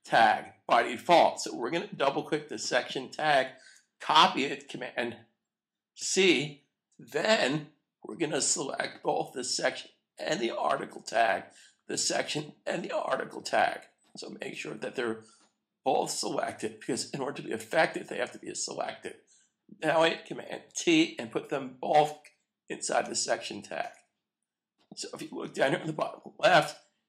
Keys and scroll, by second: 5.9 super+c, 20.6 super+t, 21.9 super+v, 23.0 Return.